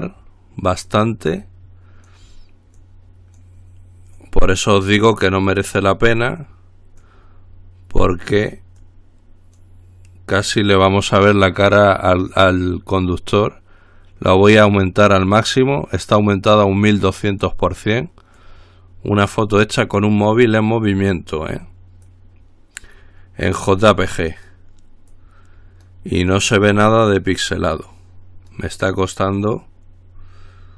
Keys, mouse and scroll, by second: 0.1-1.4 drag, 1.6-2.8 drag, 3.0-4.1 drag, 4.4-5.6 drag, 5.7-7.0 drag, 7.2-8.8 drag, 9.0-10.3 drag, 12.6-15.1 drag, 16.3-18.2 drag, 18.6-20.3 drag, 20.4-22.1 drag, 22.3-23.5 drag, 23.9-25.2 drag, 25.3-26.6 drag, 26.8-28.0 drag, 28.1-29.2 drag, 29.4-30.7 scroll down 1.